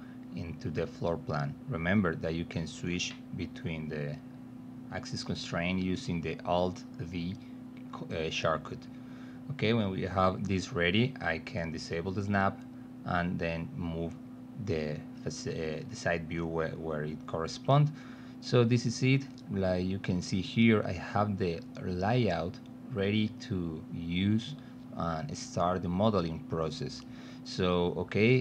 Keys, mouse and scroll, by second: 3.7 click, 5.8 middle click, 7.6 space, 8.3 alt+middle click, 10.3 s, 11.3-12.8 drag, 12.9 middle click, 13.4 alt+middle click, 14.6 f, 15.3 middle click, 16.2 middle click, 17.3 click, 18.2 l, 18.8 middle click, 19.7 p, 20.1-21.7 alt+middle drag, 22.0 middle click, 22.5 ctrl+alt+middle click, 23.4 click, 28.3 click.